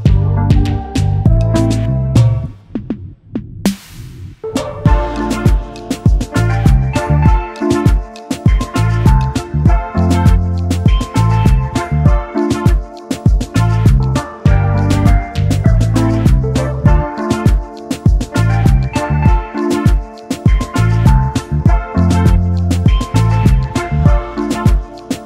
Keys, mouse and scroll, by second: 0.0-3.2 typing, 0.1 right click, 0.2 scroll down 3, 0.5 click, 0.6 click, 0.7 scroll up 2, 1.0 ctrl+click, 1.2 click, 1.5 scroll down 1, 1.7 click, 1.9 click, 2.1 click, 2.3 KP_Subtract, 2.3 KP_Enter, 2.4-2.7 scroll up 5, 2.6 shift+middle click, 3.3 scroll up 2, 3.3 shift+middle click, 3.6 Tab, 3.7 middle click, 4.1 shift+right click, 4.1 scroll down 2, 4.2 middle click, 4.4 shift+middle click, 5.1 Tab, 5.1-8.7 typing, 5.6-6.2 scroll down 4, 5.7 shift+middle click, 6.2 scroll up 1, 6.4 ctrl+click, 6.7 shift+middle click, 7.0 scroll down 6, 7.4 click, 7.5 scroll up 5, 7.5 shift+middle click, 7.8 click, 8.2 shift+middle click, 8.3 scroll up 1, 8.5 click, 8.6 right click, 8.8 click, 8.9 scroll down 2, 9.0 shift+middle click, 9.1 shift+middle click, 9.3 scroll up 1, 10.1 middle click, 10.2 shift+middle click, 10.5 KP_0, 10.7 scroll up 1, 10.8 s, 11.0 shift+middle click, 11.1 s, 11.1 click, 11.3 middle click, 11.4 KP_Decimal, 11.5 shift+middle click, 11.9 click, 12.4-15.2 typing, 12.6 click, 12.8 shift+middle click, 12.9 scroll down 3, 13.0 shift+middle click, 13.4 click, 13.5 shift+middle click, 13.7 click, 13.9 middle click, 14.1 scroll up 1, 14.1 shift+middle click, 14.4 ctrl+click, 15.1 click, 15.2 scroll down 1, 15.3 shift+middle click, 16.2 scroll down 1, 16.3 click, 16.7 scroll down 1, 16.8 shift+middle click, 16.9 scroll up 4, 17.2-18.2 typing, 17.7 KP_Enter, 17.8 scroll down 1, 17.8 shift+middle click, 18.0 scroll up 1, 18.1 ctrl+click, 18.7 click, 18.8 scroll down 1, 19.1 click, 20.1-21.1 typing, 20.2 click, 20.4 shift+middle click, 20.4 scroll down 2, 20.5 scroll up 2, 20.5 right click, 20.6 right click, 20.9 click, 21.0 scroll down 1, 23.5 scroll up 1, 23.6 scroll down 1, 23.9 scroll up 1, 24.0 z, 24.3 shift+middle click, 24.9 click.